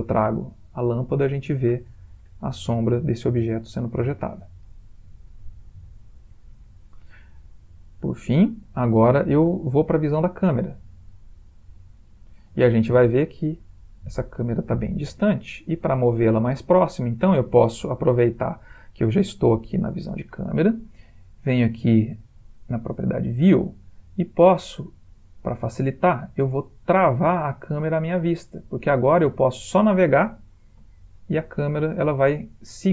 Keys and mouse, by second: 0.0-0.5 typing, 1.2 middle click, 3.4 typing, 4.1-4.5 middle click, 4.4 middle click, 4.9 g, 7.9 middle click, 11.5 click, 15.6 click, 22.5 click, 29.2 click, 31.1 ctrl+middle click, 32.4 middle click.